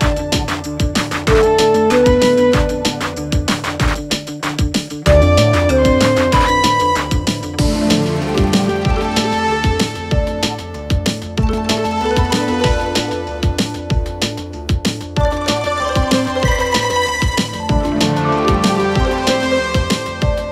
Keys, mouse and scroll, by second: 2.0 click, 3.0 ctrl+z, 3.7 click, 6.2 click, 7.4 g, 10.6 Tab, 11.2 g, 12.6 click, 13.0 click, 13.2 Tab, 13.4 click, 16.8 click.